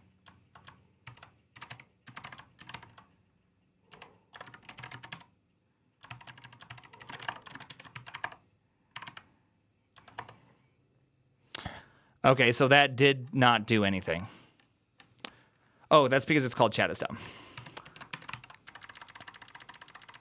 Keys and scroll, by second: 0.0-7.6 typing, 2.6 ctrl+f, 6.7 ctrl+c, 7.8 ctrl+c, 8.0 Up, 8.1 Return, 8.8 Up, 8.9 Up, 10.0 Return, 17.4 ctrl+c, 17.7 ctrl+a, 18.0-20.2 typing, 18.1 ctrl+c.